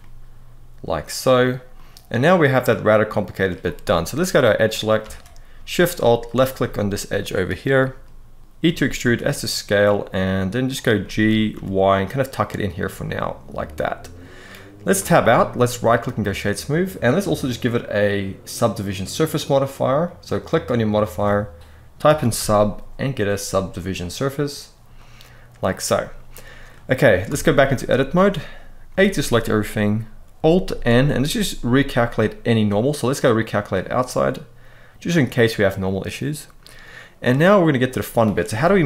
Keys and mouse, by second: 1.4-3.1 middle drag, 4.2 click, 4.7 alt+a, 5.9 alt+shift+click, 6.7 middle click, 8.4 s, 8.4 e, 8.7 s, 10.4 click, 10.7 middle click, 11.0 g, 11.2 y, 12.4 click, 12.9-13.9 middle drag, 14.7 Tab, 15.4-15.9 right drag, 20.3-23.9 drag, 24.7-26.4 middle drag, 27.0 Tab, 27.2 middle click, 28.6 a, 30.4 alt+n, 33.8-35.8 middle drag, 37.0 middle click.